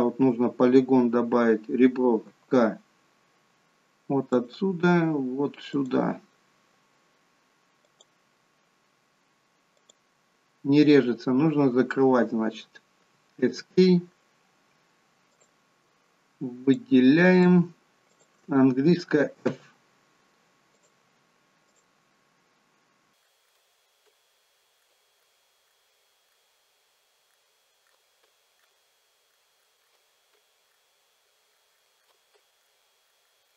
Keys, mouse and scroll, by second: 2.2 k, 15.3 click, 16.7 shift+click, 17.3 shift+click, 18.1 shift+click, 19.5 f, 20.7 click, 21.7 shift+click, 23.2 click, 23.5 shift+click, 24.1 f, 24.8 click, 25.2 shift+click, 25.7 shift+click, 26.3 shift+click, 27.3 shift+click, 27.9 shift+click, 28.2 f, 28.6 click, 29.3 shift+click, 29.6 shift+click, 29.8 shift+click, 30.3 f, 30.7 click, 31.5 shift+click, 31.7 shift+click, 32.0 shift+click, 32.3 f, 32.6 click, 33.1 shift+click, 33.3 shift+click, 33.5 shift+click.